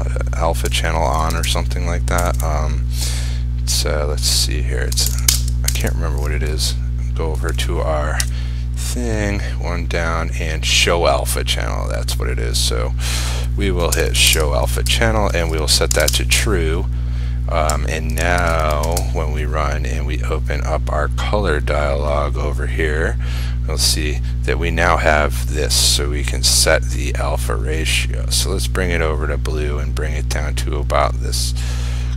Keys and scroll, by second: 5.4 ctrl+space, 8.6 F1, 14.4 ctrl+space, 18.3 ctrl+s, 19.0 ctrl+r.